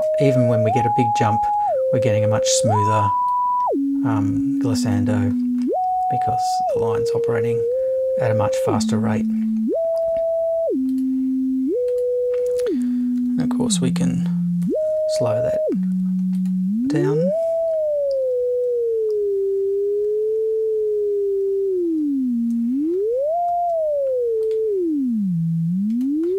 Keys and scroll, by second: 13.2 BackSpace, 14.6 7.